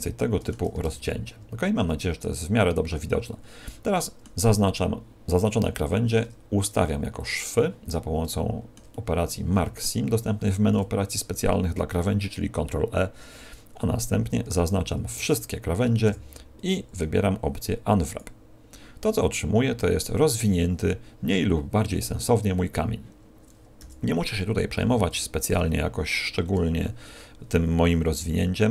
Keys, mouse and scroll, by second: 0.7 ctrl+space, 1.0 middle click, 2.4 middle click, 6.0 ctrl+e, 8.2 shift+middle click, 8.8 middle click, 12.7-13.1 scroll up 2, 14.4-14.7 scroll up 1, 14.4 a, 15.0 a, 16.0 u, 23.8 l, 24.8 g, 26.5 o, 28.2 l.